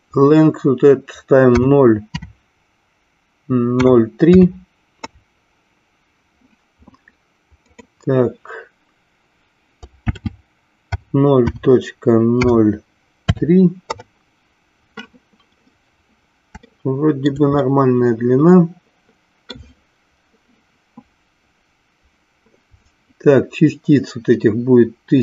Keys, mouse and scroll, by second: 7.7-14.9 drag, 16.8 shift+middle click, 17.8-19.7 middle drag.